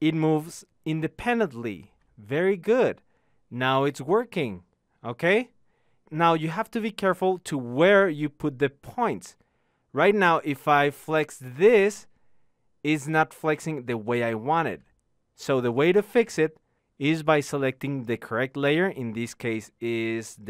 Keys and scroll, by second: 11.8 ctrl+z.